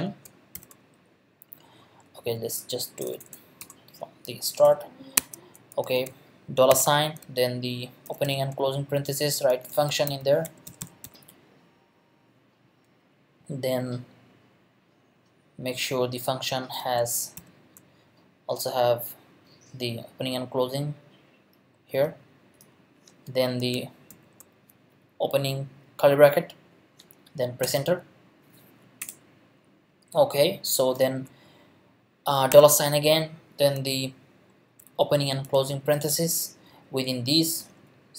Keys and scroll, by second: 0.2 shift+BackSpace, 2.2 Right, 3.0 BackSpace, 4.6 Return, 5.2 Tab, 6.0 shift+Tab, 6.7 shift+4, 7.8-11.5 typing, 8.9 shift+Left, 11.7 Right, 16.4 Left, 17.0 shift+Left, 17.4 shift+9, 24.1 shift+[, 27.6 Return, 29.0 Return, 32.5 shift+4, 35.1 shift+9, 35.4 shift+0, 36.6 shift+Left, 37.6 !.